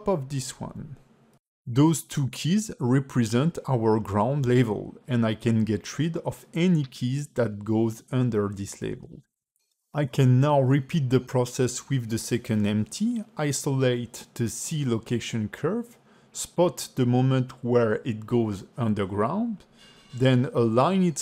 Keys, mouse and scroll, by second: 1.7 click, 2.4 shift+d, 4.3 click, 5.8 x, 6.9 click, 10.2 scroll down 2, 11.0 click, 13.2 click, 14.5 click, 17.0 click, 18.2 click, 18.9 g.